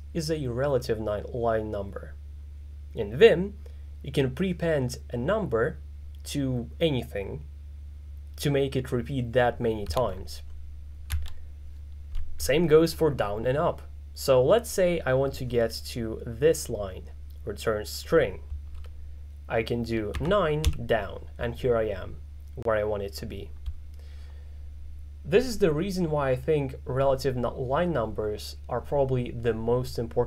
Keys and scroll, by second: 20.2 9, 20.7 j.